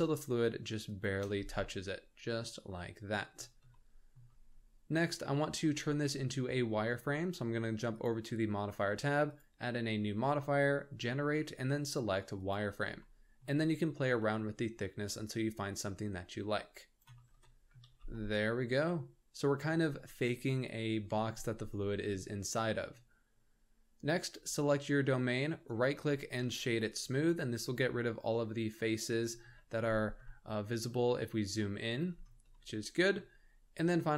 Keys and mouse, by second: 1.6-3.1 middle drag, 3.7-4.1 shift+middle drag, 9.3-12.5 drag, 13.0-13.4 shift+middle drag, 14.4-17.0 shift+drag, 17.4-17.7 middle drag, 17.8 alt+a, 18.1-19.5 middle drag, 21.7-22.1 middle drag, 24.2 click, 25.6-29.0 drag, 29.5 shift+middle click, 30.2-31.5 shift+middle drag, 32.5-33.1 shift+middle drag.